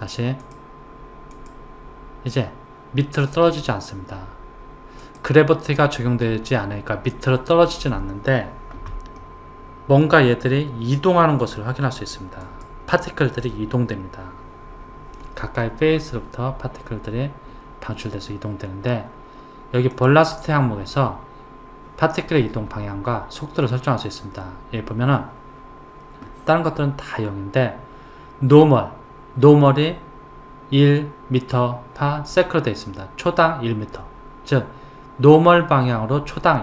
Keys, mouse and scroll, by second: 0.4 click, 1.3 click, 5.0 click, 9.1-11.4 middle drag, 11.4 click, 13.5-16.5 middle drag, 20.0 click, 23.7 click.